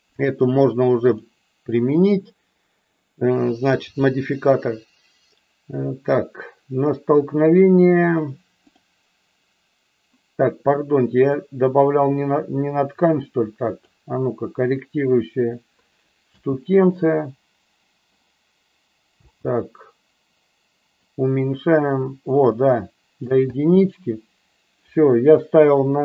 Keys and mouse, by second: 0.1-1.2 drag, 11.2-13.9 drag, 16.2 space, 19.2 space, 21.0-23.2 drag, 23.3 space.